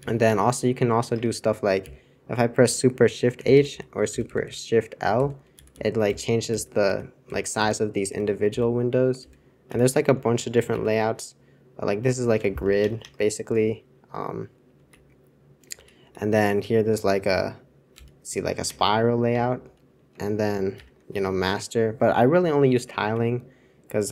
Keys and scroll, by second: 0.0 super+j, 1.1 super+Return, 1.8 super+j, 3.3 shift+super+h, 4.0-7.2 typing, 4.0 super+l, 5.5 super+h, 6.0 super+l, 6.8 super+h, 7.2 super+l, 7.5 super+h, 8.0 super+h, 9.2 super+l, 9.6 super+h, 10.7 alt+super+6, 12.6 super+Return, 12.8 super+Return, 13.0 super+Return, 14.1 super+Return, 15.7 super+c, 16.0 super+c, 17.9 alt+super+7, 18.6 super+Return, 19.3 super+Return, 20.7 alt+super+4.